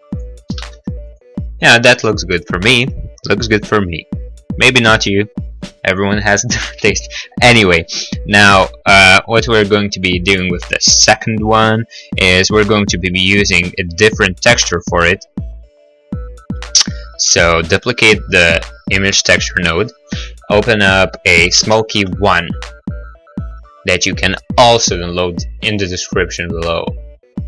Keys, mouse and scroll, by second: 0.1 click, 0.3 click, 0.3 0, 0.5 ., 0.7 Return, 0.7 5, 1.0 click, 1.2 click, 1.9 click, 2.4 middle click, 2.6 middle click, 8.5 middle click, 8.6 middle click, 8.7 middle click, 8.8 middle click, 9.0 middle click, 9.5 middle click, 10.1 middle click, 10.3-10.7 scroll, 11.1 middle click, 13.3 right click, 14.6 shift+d, 17.4 click, 19.3 click, 21.1 click, 21.2 click, 21.5 Return.